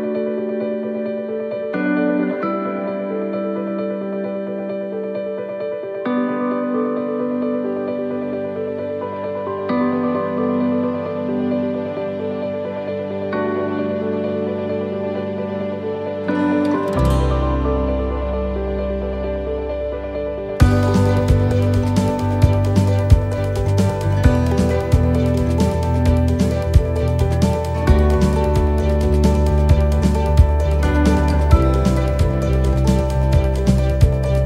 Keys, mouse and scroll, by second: 2.5 click, 8.0 middle click, 8.6-9.3 scroll down 3, 9.1 middle click, 10.6 shift+d, 12.1 r, 15.4 click, 18.0 middle click, 18.8 shift+middle click, 19.6 middle click, 21.1 click, 22.3 middle click, 24.2 middle click, 24.6 middle click, 25.4 click, 27.0 middle click, 27.8 click, 32.8 click, 32.8 middle click, 34.1 click.